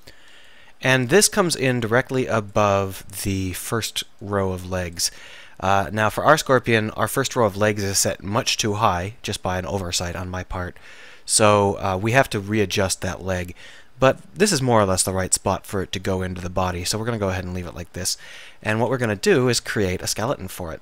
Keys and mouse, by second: 6.1 middle click, 10.3-11.4 middle drag, 12.3-16.5 middle drag, 18.5 KP_1, 18.9 KP_1, 19.1 KP_7.